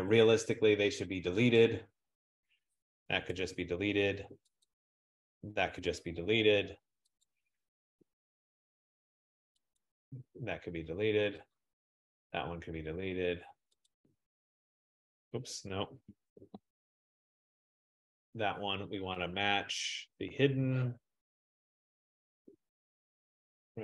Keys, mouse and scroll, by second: 1.6 click, 3.4 BackSpace, 4.7 click, 5.6 BackSpace, 7.4 click, 8.2 BackSpace, 9.8 click, 10.6 BackSpace, 11.7 click, 12.4 BackSpace, 14.0 click, 16.5 ctrl+z, 22.4 click, 23.7 click.